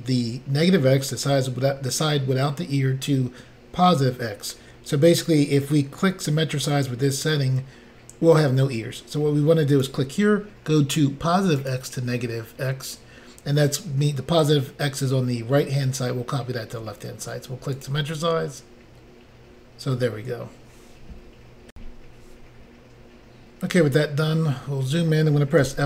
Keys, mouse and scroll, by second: 9.7 click, 9.8 click, 11.6 click, 11.7 click, 17.8 click, 17.9 click, 21.7 Insert, 24.0-24.5 scroll up 4, 25.6 f.